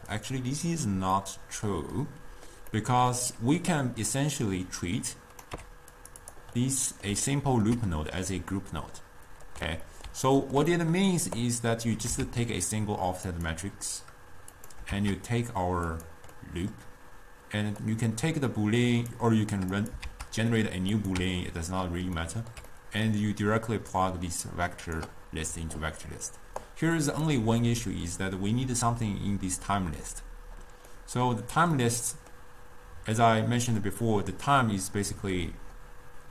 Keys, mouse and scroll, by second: 1.2-3.8 middle drag, 3.8-5.6 drag, 5.6 g, 6.3 click, 6.8-9.8 middle drag, 9.8-10.3 scroll down 2, 10.3-11.5 ctrl+middle drag, 11.5 click, 12.9 shift+d, 14.6 click, 15.4 shift+d, 16.4-17.9 middle drag, 17.9 click, 19.9 click, 20.5 shift+d, 21.7 x, 22.5-24.0 ctrl+middle drag, 24.0 drag, 26.8 click, 27.7-30.7 middle drag, 30.9-36.3 middle drag.